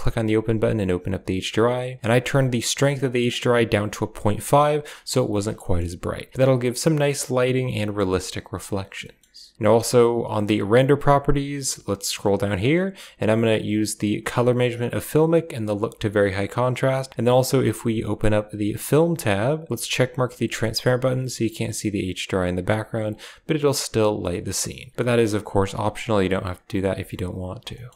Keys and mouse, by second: 3.2 click, 5.6 shift+middle click, 7.8 shift+middle drag, 9.1 shift+middle click, 10.3 click, 10.9 click, 13.6 click, 14.8 click, 15.5 click, 17.1 click, 18.3 click, 19.4 click, 20.1 click, 21.0 click, 23.0-23.3 drag, 24.1 click, 25.0 click, 25.9 click.